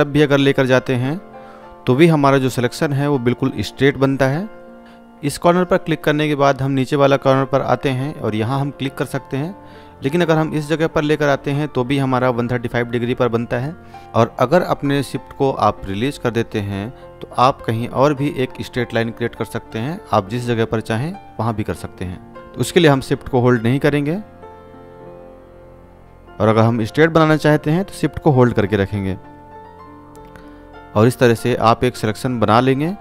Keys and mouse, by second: 5.0 shift+click, 30.7 shift+click.